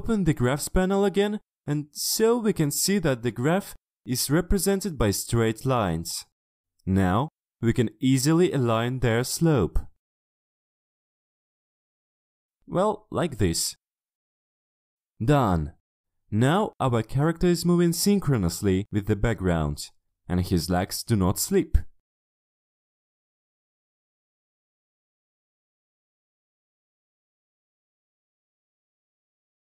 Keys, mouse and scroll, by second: 0.5 click, 3.3 shift+click, 4.3 shift+click, 5.1 shift+click, 6.5 shift+click, 7.4 shift+click, 8.4 shift+click, 9.3 shift+click, 9.9 shift+click, 10.2 shift+click, 11.0 drag, 11.4 shift+click, 11.7 shift+click, 11.9 shift+click, 12.3 shift+click, 12.9 shift+click, 14.3 shift+click, 15.5-16.3 ctrl+scroll down 2, 16.3 ctrl+click, 16.8-17.9 drag, 18.2 shift+click, 18.6 ctrl+scroll down 1, 18.9 ctrl+middle click, 19.3 click, 19.9 click, 20.5 ctrl+middle click, 20.8 ctrl+scroll up 2, 21.7 click, 22.5 click, 23.5 click.